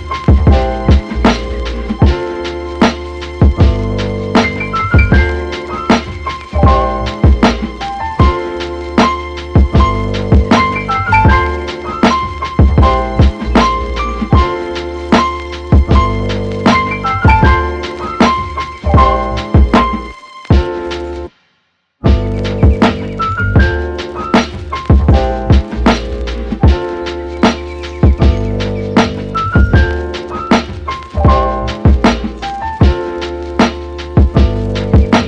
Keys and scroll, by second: 24.5 super+s, 24.8 Right, 25.2 BackSpace, 25.3 2, 25.3 Return.